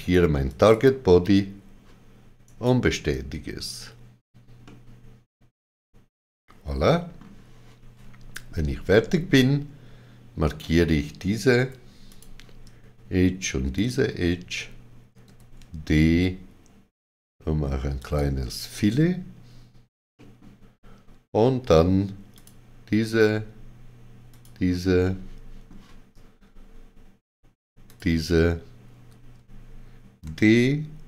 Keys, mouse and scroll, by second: 0.4 click, 2.4 right click, 4.6 middle click, 11.5 2, 12.0 click, 13.7 shift+click, 15.2 d, 17.9 shift+click, 18.7 right click, 20.1 middle click, 22.3 alt+click, 24.3 alt+shift+click, 25.0 middle click, 27.8 alt+shift+click, 30.2 d.